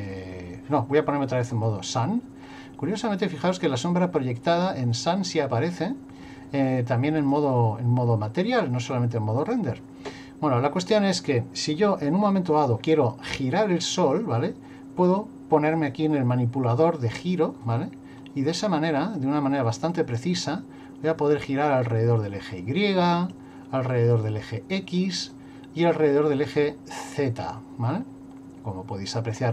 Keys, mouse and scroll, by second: 1.5 click, 7.2 click, 15.7 click, 17.6 click, 19.9 click, 24.3 click, 26.4 click.